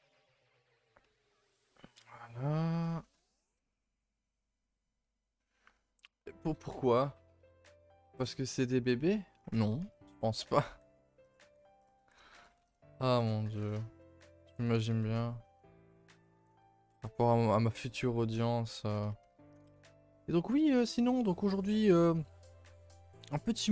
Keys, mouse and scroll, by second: 0.2-0.6 scroll down 5, 0.8 scroll up 1, 1.4 click, 1.8-2.1 scroll up 3, 2.1 scroll down 1, 2.3 click, 2.9-5.9 shift+middle drag, 10.6 r, 11.4 g, 11.9 r, 12.4 g, 14.5 s, 16.0 g, 16.9 r, 18.1 g, 19.2 a, 19.3 a, 19.7 ctrl+s, 23.6 click.